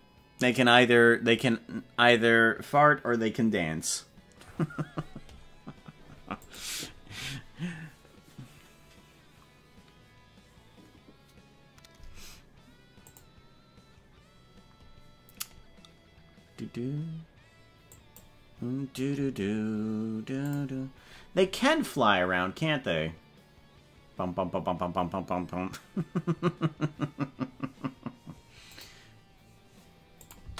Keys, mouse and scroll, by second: 30.2 click, 30.4 space.